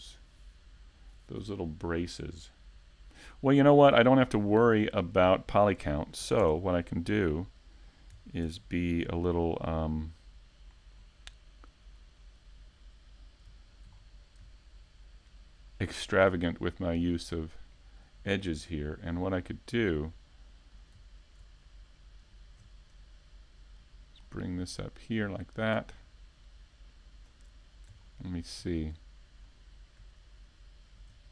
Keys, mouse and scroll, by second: 0.4 scroll down 1, 0.9 shift+middle click, 3.1 right click, 4.7 shift+middle click, 5.3-6.0 scroll up 2, 5.6 shift+middle click, 6.1 s, 7.7 click, 7.9 scroll down 3, 8.1 shift+middle click, 10.4 shift+e, 10.8 z, 12.4 z, 14.5 shift+d, 17.0 click, 17.3 a, 17.8 middle click, 18.7 shift+middle click, 19.3 middle click, 20.7-21.2 scroll up 3, 25.1 middle click, 25.1-25.7 scroll up 2, 26.9-27.6 scroll up 1, 27.6 shift+middle click, 27.6-28.6 scroll up 3, 28.4 shift+middle click, 29.1-29.7 scroll down 1, 29.7 scroll down 4, 30.0 shift+middle click, 30.5 scroll down 2.